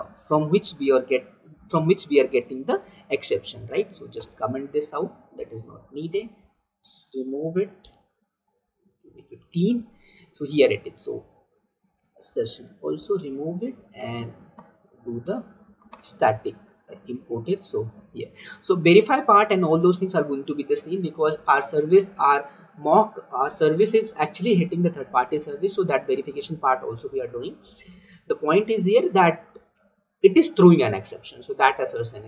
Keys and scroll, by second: 2.4 ctrl+v, 4.2 ctrl+/, 8.1 ctrl+y, 12.3 Delete, 14.6 alt+Return, 15.6 Down.